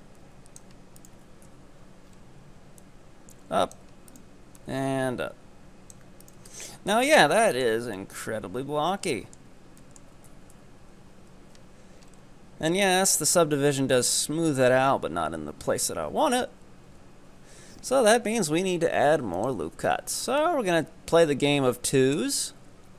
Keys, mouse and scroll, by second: 1.0 ctrl+right click, 1.5 KP_3, 2.1 scroll up 3, 2.9-4.1 drag, 4.1 right click, 4.6-6.3 drag, 6.3 ctrl+right click, 6.5 z, 6.8 scroll down 4, 7.0 middle click, 7.8 Tab, 8.0-9.6 middle drag, 9.6 Tab, 9.9 middle click, 10.4 KP_4, 10.6 KP_7, 10.9 Tab, 11.5 z, 12.0-12.9 scroll up 5, 12.9-13.3 scroll down 3, 13.3 Tab, 13.9 Tab, 16.9 Tab, 18.3-22.9 drag.